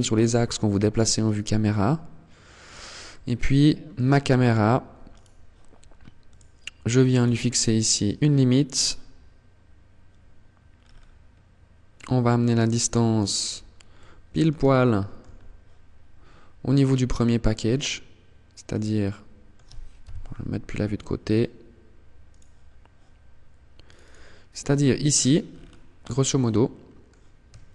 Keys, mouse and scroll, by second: 1.8 click, 2.2 middle click, 4.2 right click, 5.4 click, 6.3 click, 6.9 middle click, 9.8 scroll down 5, 11.0 click, 12.5-12.9 scroll up 4, 13.0 middle click, 13.8 shift+middle click, 15.9 click, 18.1 middle click, 19.1 KP_3, 19.8 scroll down 1, 21.4 click, 22.0-22.8 scroll up 1, 23.2 click, 24.2-25.0 scroll down 10, 25.2 scroll up 3, 25.5 middle click, 27.3 shift+click.